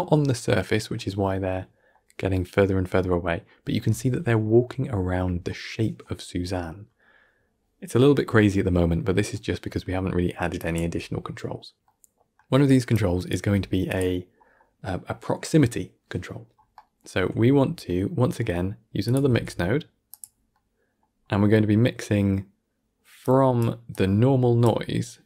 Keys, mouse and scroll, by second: 3.7 shift+space, 4.3-5.1 middle drag, 5.1 scroll up 1, 5.4-8.4 middle drag, 8.5 middle click, 9.4-9.8 scroll up 5, 9.8-10.5 middle drag, 10.5 click, 10.7 g, 11.7-12.8 middle drag, 12.8 click, 13.3 g, 16.3-16.6 scroll up 1, 16.6-18.9 middle drag, 18.9 click, 19.2 shift+d, 20.4 middle click, 20.9 scroll up 2, 21.2 middle click, 21.8-23.1 scroll down 2, 23.1 click, 23.8 drag.